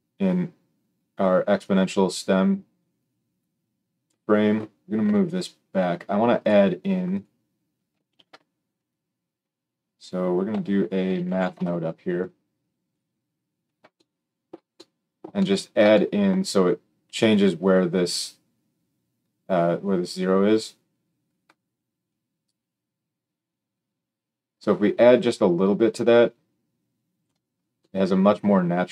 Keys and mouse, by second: 1.5-6.4 drag, 5.0 g, 6.4-7.0 middle drag, 7.0 click, 7.1-22.0 middle drag, 8.1 shift+a, 22.0-28.9 shift+drag.